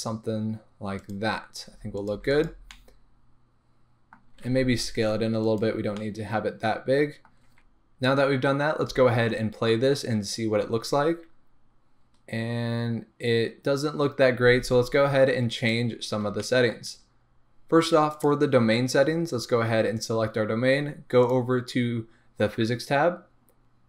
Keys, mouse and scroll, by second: 1.1 click, 1.6 s, 2.1 click, 2.1 g, 2.4 click, 2.7-5.6 middle drag, 4.2 scroll down 2, 4.3 s, 5.6 click, 6.0-7.5 middle drag, 7.5 click, 8.8 space, 9.0 space, 14.2 scroll up 2, 14.4 space, 15.6 click, 16.0-16.4 scroll down 2, 16.4-18.1 shift+middle drag, 18.1 click, 21.2 click, 23.5 scroll down 1.